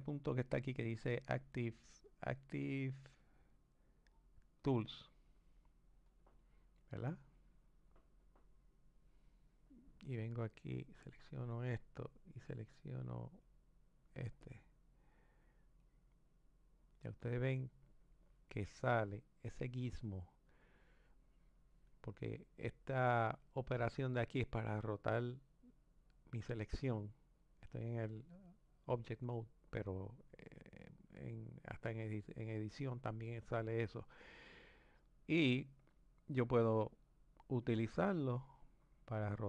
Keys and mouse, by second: 0.4-2.8 drag, 3.2-6.2 drag, 10.9-14.5 drag, 15.8-18.8 drag, 35.5 click, 38.0 click.